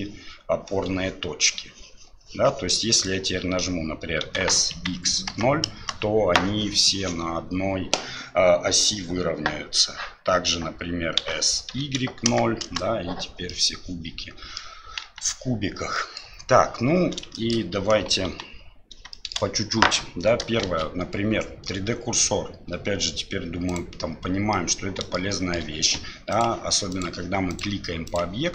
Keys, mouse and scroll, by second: 4.2 s, 11.2 s, 13.5-14.6 middle drag, 15.0 KP_1, 15.9 middle drag, 17.3 shift+middle click, 18.3 Delete, 19.1 shift+middle drag, 20.6 shift+a, 24.5-25.1 middle drag, 25.3 shift+middle drag, 26.4-27.0 drag, 27.5 click, 28.1 click.